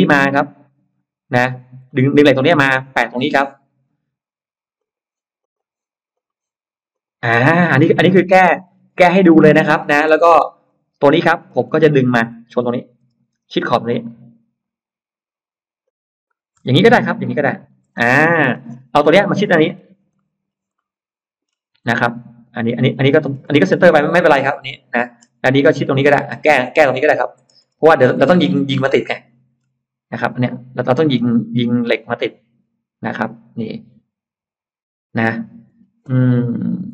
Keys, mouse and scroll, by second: 1.3-2.0 scroll up 2, 1.7 middle click, 4.6 click, 5.2 click, 6.0 click, 6.8 click, 7.2 scroll down 1, 7.6 middle click, 7.8-9.2 scroll down 3, 9.6 middle click, 10.0 space, 10.1 scroll up 1, 10.5 click, 11.3 middle click, 11.8 middle click, 12.4 middle click, 13.0 m, 15.7 click, 17.4 shift+click, 17.8 scroll down 2, 18.2 middle click, 18.3 scroll up 2, 18.4 space, 18.8 click, 19.1-19.8 scroll up 4, 20.0 middle click, 20.4 scroll up 2, 20.6 scroll down 1, 20.6 middle click, 21.7 middle click, 22.5 scroll down 1, 22.8-23.6 scroll up 4, 23.4-25.0 middle drag, 25.0-25.8 scroll down 2, 25.8 middle click, 26.6-26.9 scroll down 1, 27.1-28.1 scroll up 2, 28.0-29.4 middle drag, 29.9-30.2 scroll up 1, 30.4 middle click, 31.3-31.8 scroll up 1, 31.8-35.5 middle drag, 35.7-36.6 scroll down 4, 36.8 middle click.